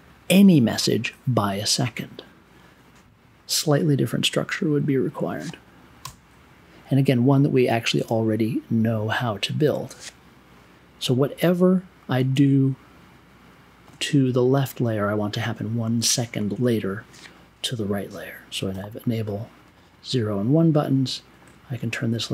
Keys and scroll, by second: 6.0 BackSpace, 7.9 BackSpace, 18.7 1.